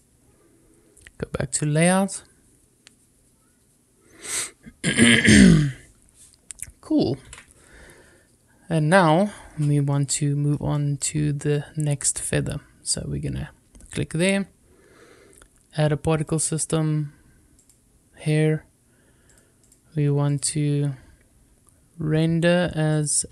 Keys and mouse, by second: 0.0 click, 7.2 ctrl+s, 9.8-10.4 middle drag, 10.6-11.0 shift+middle drag, 12.8 click, 17.5 click, 19.2 click, 19.6 click, 22.8-23.3 drag.